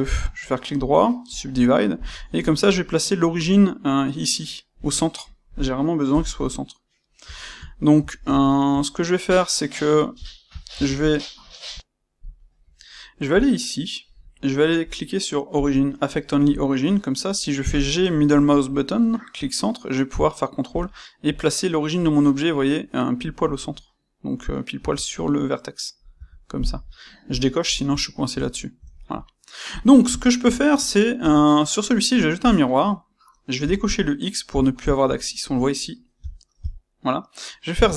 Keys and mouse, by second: 0.2-1.9 right drag, 1.9 click, 2.1-9.2 ctrl+middle drag, 6.0 KP_1, 9.2 click, 10.1-13.3 shift+middle drag, 10.7 Tab, 13.3 click, 15.5 click, 17.5 g, 20.7 ctrl+click, 24.7 Tab, 27.2 click, 27.9-29.7 ctrl+middle drag, 29.7 click, 30.1-37.9 shift+middle drag, 31.1 space.